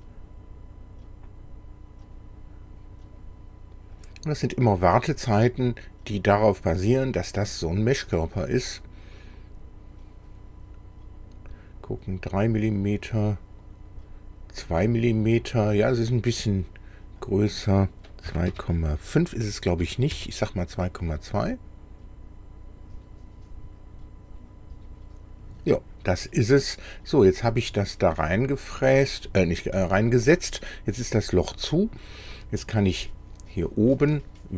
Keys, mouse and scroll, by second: 2.1 click, 4.0 click, 6.3 click, 8.3 click, 10.3 click, 12.7 click, 15.1-15.6 scroll up 1, 15.8 middle click, 17.3 click, 18.3 KP_2, 18.5 KP_Decimal, 19.8 KP_2, 20.2 KP_Enter, 25.9-26.2 scroll down 2, 26.3-27.7 middle drag, 29.8-32.0 middle drag, 33.1 middle click, 33.9 middle click.